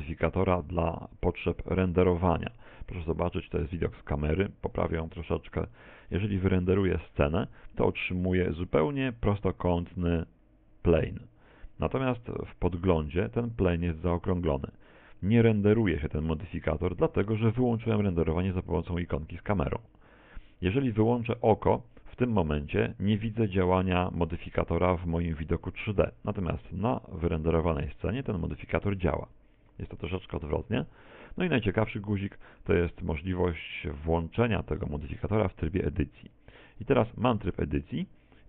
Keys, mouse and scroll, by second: 1.3 click, 2.1 middle click, 3.1 KP_0, 4.7 right click, 5.2 g, 12.0 Escape, 12.9 right click, 14.0 right click, 19.9 click, 21.8 click, 29.7 Escape, 31.8 click, 36.3 Tab, 36.9 scroll up 3, 37.6 shift+middle click.